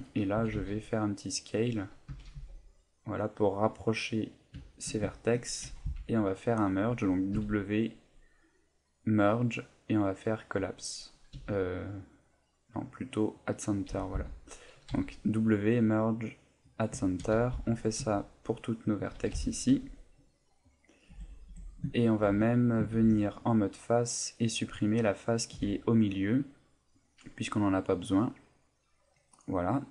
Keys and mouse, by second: 0.4 s, 1.6 click, 2.1 s, 3.8 click, 4.3 middle click, 4.6 shift+middle click, 5.0 ctrl+middle click, 5.6 a, 5.8 b, 7.3 w, 11.3 w, 13.9 a, 14.1 b, 14.9 w, 17.0 shift+middle click, 17.3 a, 17.5 b, 18.0 w, 19.2 a, 19.3 b, 19.7 w, 21.1 Tab, 21.5 Tab, 22.2 ctrl+a, 22.9 ctrl+Tab, 24.0 right click, 25.5 Delete, 27.5 middle click, 29.6 middle click.